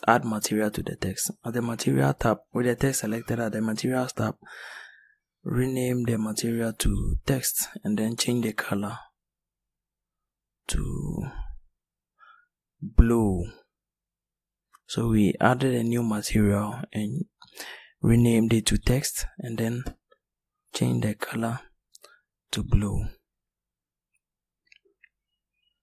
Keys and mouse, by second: 7.5 click, 9.6 click.